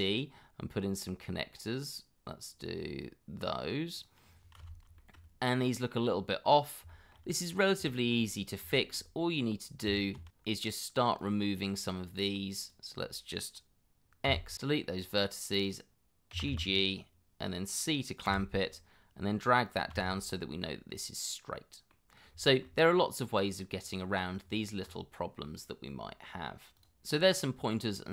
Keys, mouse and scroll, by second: 0.4 scroll down 1, 5.0 shift+middle click, 6.9 shift+middle click, 7.8 shift+middle click, 8.7 shift+middle click, 9.8 Tab, 10.4 shift+z, 11.2 scroll up 1, 14.3 x, 16.3 g, 18.2 c, 20.0 shift+z, 20.6 middle click, 22.2 scroll down 1, 22.4 shift+middle click, 22.9 middle click, 24.4 Tab, 27.1 scroll down 1, 27.4 middle click.